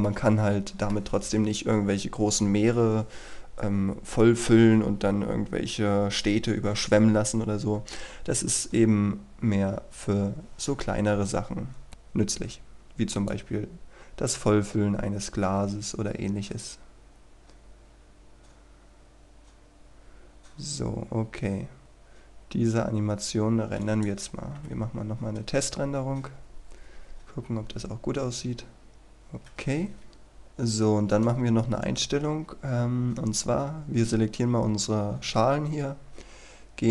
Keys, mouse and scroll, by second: 0.1 middle click, 1.3-8.0 scroll down 1, 11.9 KP_0, 13.4-24.2 drag, 24.6 F12, 28.9-30.3 scroll up 1, 30.3 click, 31.1 right click.